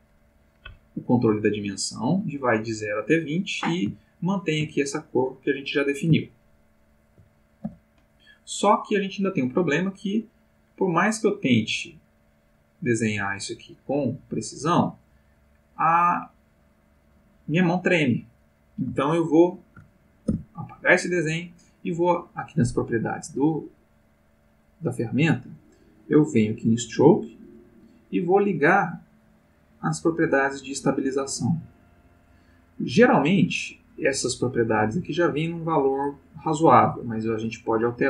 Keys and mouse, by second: 4.0 ctrl+middle click, 6.3-7.3 ctrl+middle drag, 7.6 ctrl+x, 9.6-18.6 drag, 20.3 x, 20.7 click, 26.8 click.